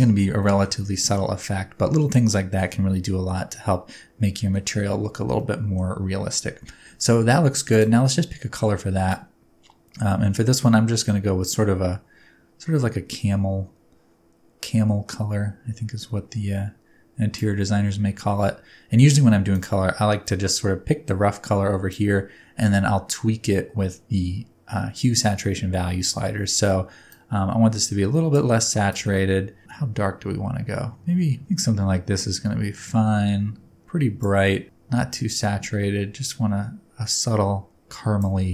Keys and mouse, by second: 0.5 shift+middle click, 5.4-5.8 shift+middle drag, 6.9 middle click, 19.5 click.